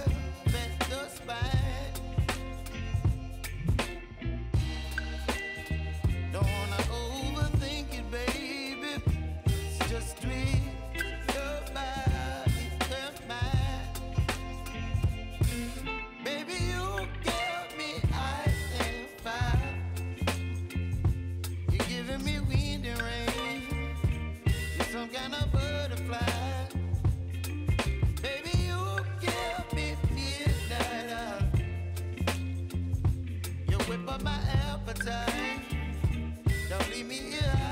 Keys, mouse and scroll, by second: 2.0-2.4 scroll down 1, 2.4 space, 2.5 click, 2.9 space, 3.3-12.4 drag, 12.8 ctrl+a, 13.5 ctrl+v, 13.9 u, 15.6 s, 16.4 click, 16.9-17.4 typing, 19.5 click, 21.4 j, 22.8 click, 23.3 Return, 24.1 click, 25.0 F9, 25.6 click, 28.5-30.8 drag, 34.4 Page_Down, 36.1 alt+].